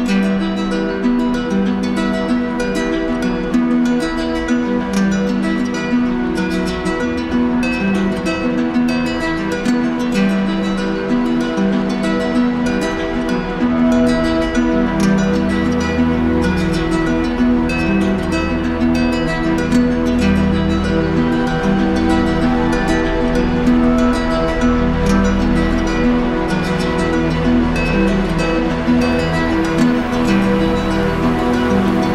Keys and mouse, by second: 2.6 click, 5.9 click, 6.3 click, 14.9 click, 15.9 shift+click, 17.7 click, 21.2 click, 24.3 click, 25.2 shift+click, 27.1 click, 29.3 alt+click.